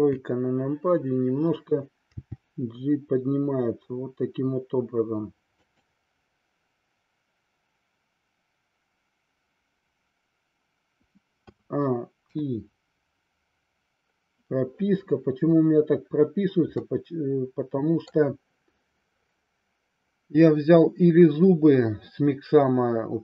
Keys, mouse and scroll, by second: 0.1 KP_3, 2.1 g, 5.7 click, 11.5 a, 12.2 i, 16.8-18.1 middle drag.